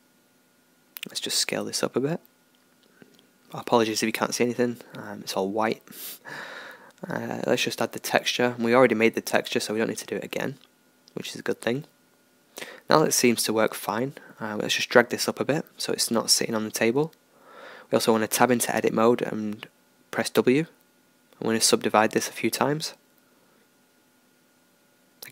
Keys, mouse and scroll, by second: 0.9 s, 3.5 click, 4.0-7.0 middle drag, 7.0-11.2 drag, 11.6-14.2 middle drag, 14.2-16.3 drag, 17.2 Tab, 18.6 w, 23.5 w, 24.4 w, 25.1 w.